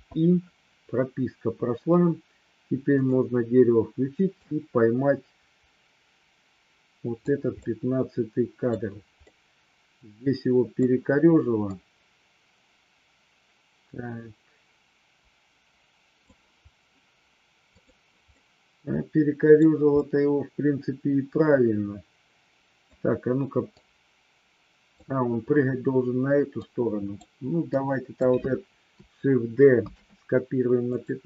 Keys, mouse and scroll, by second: 2.9 click, 4.3-7.3 drag, 7.5-8.7 middle drag, 9.3-10.8 middle drag, 11.7-16.3 drag, 17.7 click, 18.3-19.5 middle drag, 19.9-22.8 middle drag, 23.8-24.9 drag, 26.5 click, 27.7-28.2 drag, 29.8 shift+d, 30.9 click.